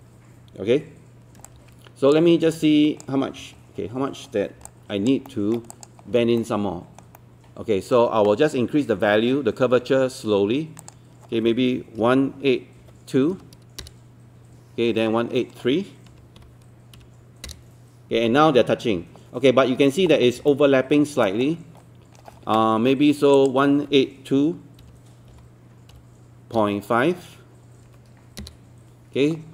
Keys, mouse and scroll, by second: 3.4 Escape, 4.7 alt+click, 5.7 alt+click, 6.0-6.4 alt+scroll up 1, 6.4 alt+middle click, 7.2 alt+middle click, 10.8 click, 12.0 KP_1, 19.7-20.0 scroll up 1, 20.1 scroll down 1, 20.5 alt+middle click, 21.3 alt+middle click, 23.4 click, 24.8 KP_1, 26.6 KP_Decimal, 27.9 KP_5.